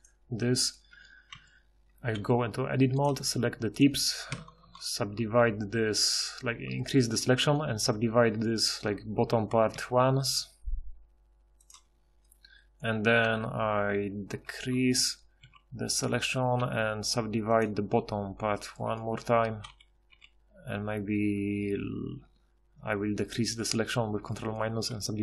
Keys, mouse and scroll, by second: 0.9 Tab, 1.4 a, 4.3 ctrl+KP_Add, 4.5 ctrl+KP_Add, 4.7 ctrl+KP_Add, 9.7 w, 11.7 w, 14.3 ctrl+KP_Subtract, 14.6 ctrl+KP_Subtract, 15.0 ctrl+KP_Subtract, 15.4 ctrl+KP_Subtract, 17.6 w, 19.7 ctrl+KP_Subtract, 20.1 ctrl+KP_Subtract, 24.9 w.